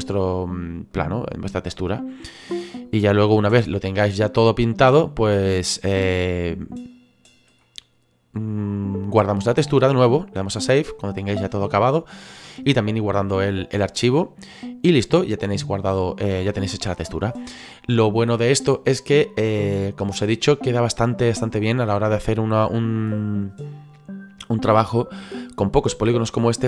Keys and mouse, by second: 0.9 click, 2.2 click, 4.8 click, 5.9 click, 7.6 middle click, 9.8 click, 14.1 middle click, 15.5 middle click, 21.4 click, 25.8 middle click.